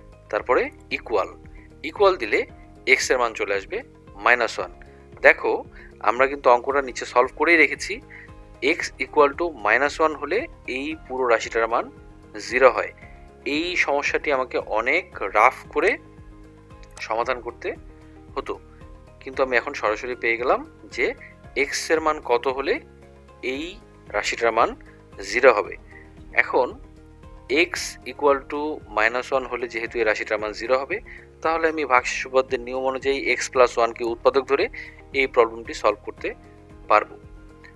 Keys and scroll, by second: 0.8 =.